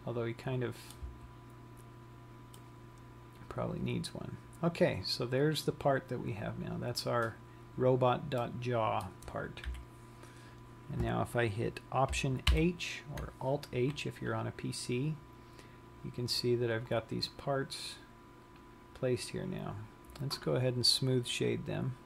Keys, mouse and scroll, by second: 8.7 middle click, 10.0 KP_3, 13.2 alt+h, 15.5 scroll down 1, 17.8 click, 19.4 click.